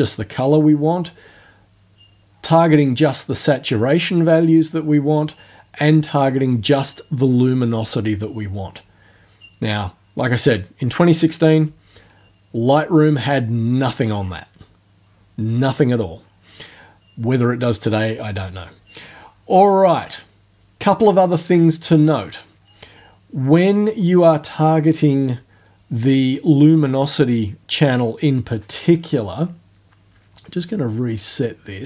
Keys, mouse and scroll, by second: 1.2 click, 5.8 click, 30.5-31.8 drag.